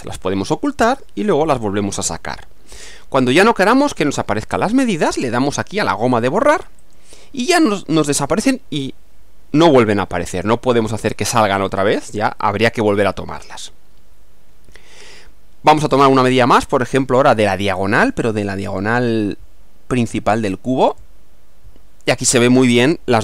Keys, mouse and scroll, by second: 0.1 click, 1.5 click, 3.3-4.9 middle drag, 6.8 click, 13.3-15.2 middle drag, 16.2 click, 18.7 click, 20.9 click.